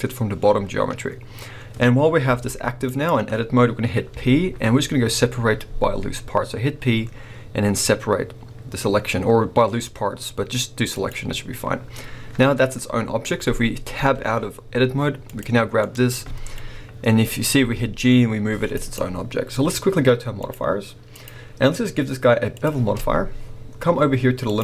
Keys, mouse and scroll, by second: 2.2 g, 3.0 right click, 4.1 p, 13.9 Tab, 14.6 scroll down 1, 15.2 click, 15.6 scroll down 1, 15.8-18.9 middle drag, 16.6-17.6 scroll up 2, 17.6 g, 18.9 right click, 20.4 click, 21.1-24.6 drag.